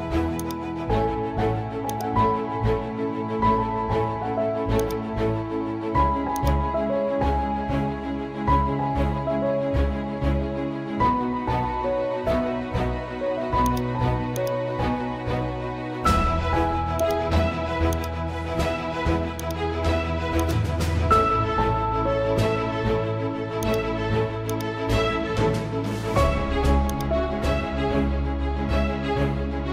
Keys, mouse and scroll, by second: 0.4 click, 1.1-1.9 scroll up 1, 1.9-4.0 drag, 4.0 ctrl+t, 4.8-9.0 drag, 9.0 Return, 13.7 click, 13.7-14.5 typing, 15.7 ctrl+z, 16.2-17.0 scroll down 1, 17.0 click, 23.6 click, 25.1 ctrl+z, 25.6-26.4 typing, 26.9 click, 28.0 z.